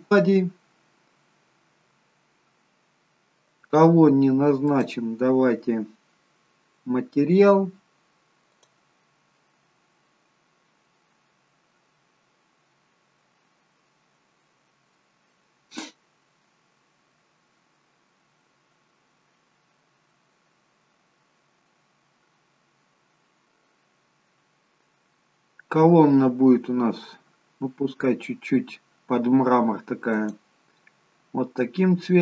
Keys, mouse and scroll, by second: 0.8-1.7 scroll down 4, 5.9 click, 23.7 click.